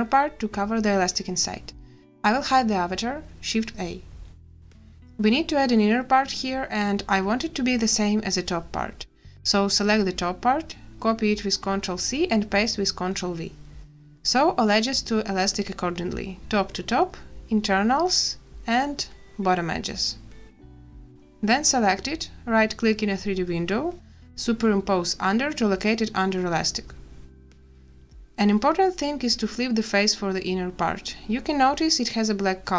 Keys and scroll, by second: 3.7 shift+a, 11.6 ctrl+c, 12.5 ctrl+v, 15.0 n, 21.5 a.